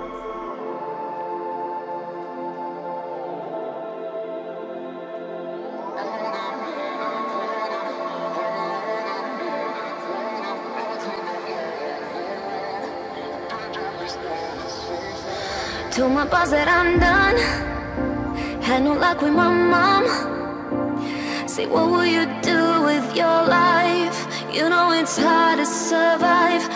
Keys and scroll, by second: 20.5 Return.